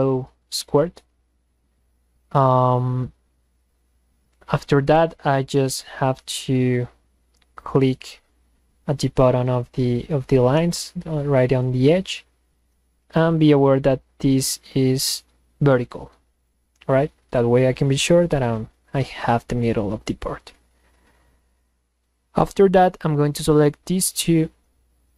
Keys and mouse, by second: 14.1 click, 16.4 click, 23.4 click.